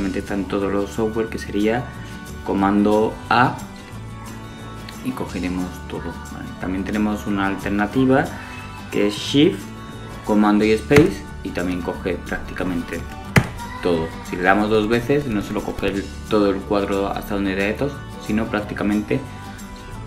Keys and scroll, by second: 9.1 space.